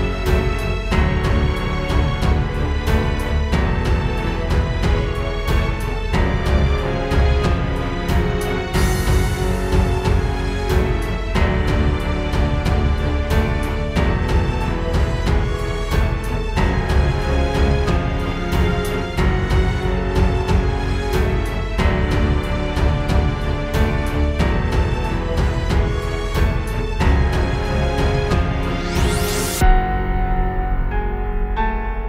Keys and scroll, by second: 12.7 super+z, 15.3 space, 15.8 super+space, 16.4 space, 17.2 space, 18.3 space, 18.8 alt+super+space, 28.9 super+s, 30.4 space, 31.5 space.